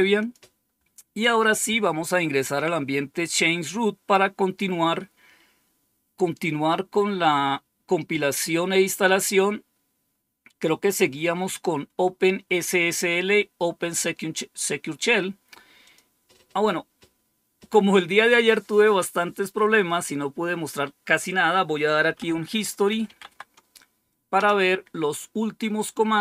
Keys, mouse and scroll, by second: 0.1 click, 15.7 click, 21.7-23.4 typing, 24.3 Return.